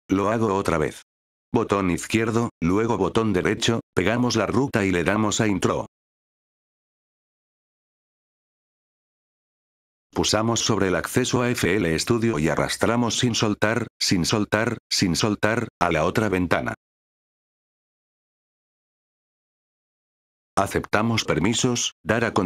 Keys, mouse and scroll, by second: 2.0 click, 3.0 right click, 4.7 click, 9.2 F8, 9.9 click, 12.2-17.1 drag, 19.8 F8, 20.4 click.